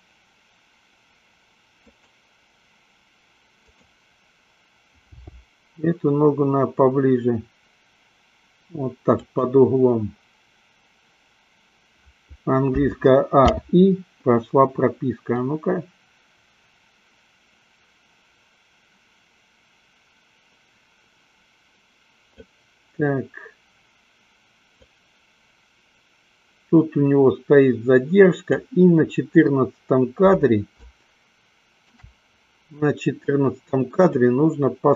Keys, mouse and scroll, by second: 3.7 click, 5.5 g, 9.5 click, 12.8 a, 13.7 i, 15.7-22.8 drag, 25.1-29.0 drag, 30.8-32.2 shift+middle drag, 34.0-34.9 drag.